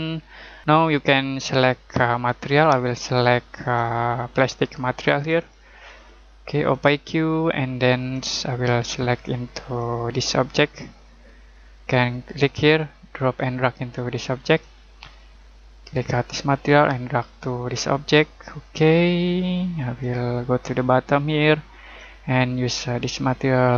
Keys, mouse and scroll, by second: 0.6 click, 2.4 click, 12.3 click.